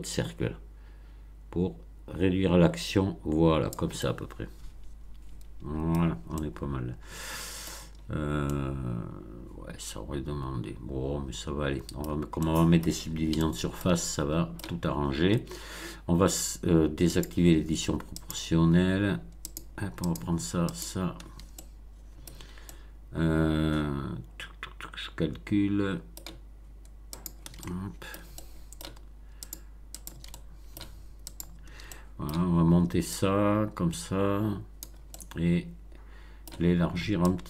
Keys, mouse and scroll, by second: 0.3-0.6 scroll down 2, 1.0-1.6 scroll down 4, 3.9-5.9 middle drag, 5.9-6.3 scroll down 1, 6.3-7.8 middle drag, 8.0-8.3 scroll up 1, 8.4-12.2 middle drag, 12.3 middle click, 13.3-14.7 shift+middle drag, 17.0 click, 18.1 click, 19.4 shift+click, 20.0 shift+click, 20.6 shift+click, 21.5-22.4 shift+middle drag, 22.6-26.3 shift+middle drag, 27.1 shift+click, 27.6-28.3 shift+middle drag, 28.4-28.9 shift+middle drag, 29.3 shift+click, 29.9 shift+click, 30.2-30.9 shift+middle drag, 31.3 shift+click, 31.8-32.4 shift+middle drag, 33.1-34.9 drag, 35.0-36.6 middle drag, 37.2-37.4 drag.